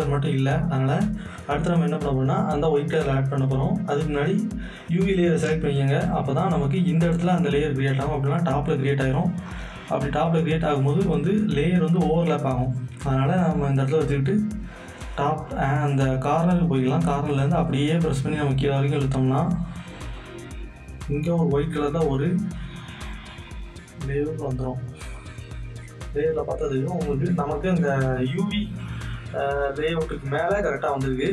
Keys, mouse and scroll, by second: 0.5 click, 0.5 click, 2.9 click, 9.4 click, 9.5 click, 16.8 click, 16.9-23.7 drag, 25.2 click, 26.2 click, 30.9 click, 30.9 click.